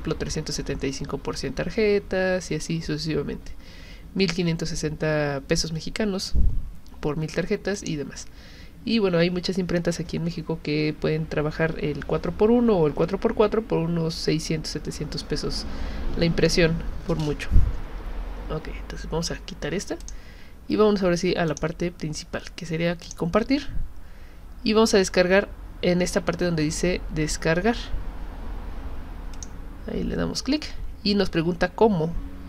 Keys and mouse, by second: 7.7 click, 20.0 click, 21.5 click, 23.1 click, 29.3 click.